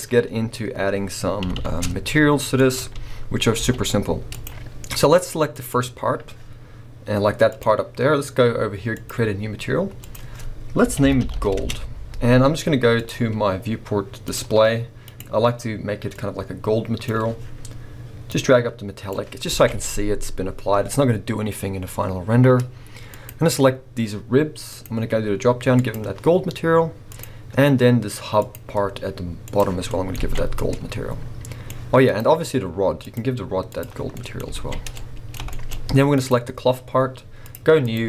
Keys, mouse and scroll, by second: 1.4 r, 3.0 f, 3.6 g, 4.4 click, 4.7 scroll, 5.7 click, 7.5 click, 8.9-15.2 drag, 11.7 Return, 18.3-23.2 drag, 19.5 alt+a, 20.9-21.5 scroll up 1, 24.7-27.2 drag, 28.4-29.8 drag, 29.8-31.1 middle drag, 30.2 alt+a, 31.5-32.1 middle drag, 32.1-34.2 drag, 34.1-34.5 scroll up 4, 34.2-36.1 middle drag, 34.5 alt+a, 36.1 click, 37.5-38.0 drag.